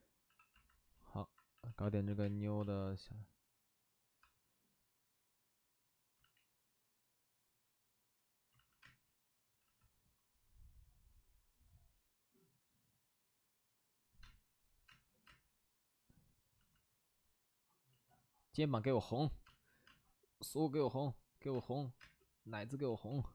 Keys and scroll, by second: 0.2 c, 1.5 c, 2.2 space, 2.5 space, 4.2 space, 6.1 ctrl+z, 8.5 ctrl+z, 8.8 space, 9.6 c, 14.2 space, 14.8 space, 15.2 space, 17.2 ctrl+z, 17.8 ctrl+z, 19.4 space, 21.5 space, 21.9 space, 22.8 ctrl+z.